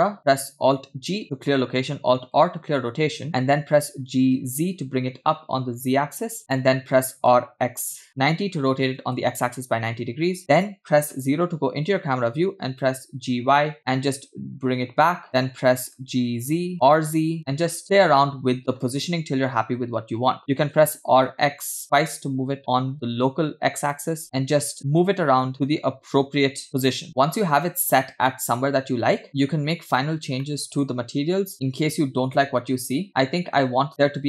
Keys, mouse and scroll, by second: 0.3 scroll down 2, 1.7 alt+g, 3.0 alt+r, 4.2 g, 8.3 r, 11.7 KP_0, 13.0 g, 16.2 g, 17.1 r, 20.4 r, 26.3 g, 27.7 scroll down 1, 29.9 click, 30.4-30.9 scroll down 3, 30.9 middle click, 32.0 click, 34.0 click.